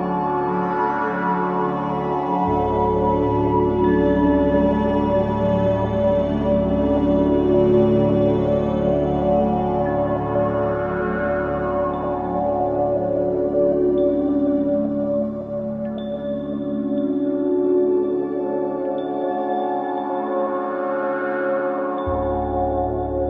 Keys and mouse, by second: 0.0 z, 1.4 click, 2.4-3.2 typing, 2.7 click, 4.6 typing, 5.3 click, 6.1 typing, 7.2-11.7 typing, 7.8-8.8 drag, 13.7-16.0 typing, 14.9-16.0 drag, 17.7-18.1 typing, 18.6-20.2 drag, 19.7 typing, 21.5 typing, 22.6 typing.